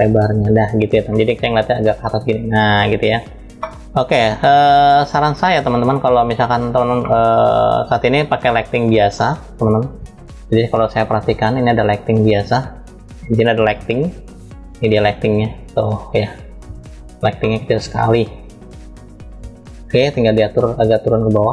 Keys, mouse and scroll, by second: 0.4-0.8 drag, 1.5-3.8 middle drag, 4.0 n, 5.7 scroll up 1, 7.3-10.5 shift+middle drag, 10.9 click, 11.6 scroll up 1, 11.7 scroll down 1, 13.7 click, 13.7 scroll down 6, 14.4 scroll down 1, 15.1 scroll down 1, 15.7 scroll up 1, 17.1-18.1 middle drag, 17.1 scroll up 3, 17.5 scroll down 3, 18.1 scroll down 1, 18.2-18.9 scroll up 1, 18.9 scroll down 1, 19.1-20.0 scroll down 1, 20.0-21.1 drag, 20.0 scroll down 1.